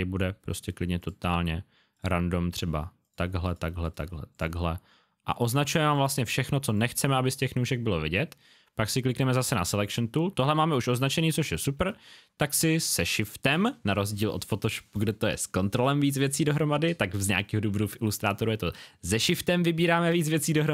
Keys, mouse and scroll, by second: 5.8 click, 12.8 shift+click.